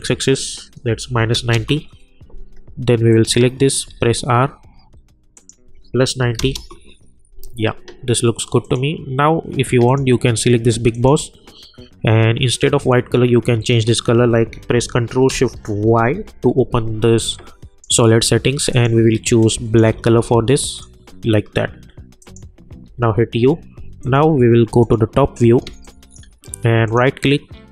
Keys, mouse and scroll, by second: 0.9 -, 1.5 Return, 3.1 click, 3.9 r, 5.3 click, 6.7 Return, 8.6 click, 15.9 ctrl+shift+y, 17.3-19.8 drag, 19.8 Return, 20.7 click, 22.9 u, 24.0 click, 25.6 space, 25.8 click, 26.1 space, 26.8 right click.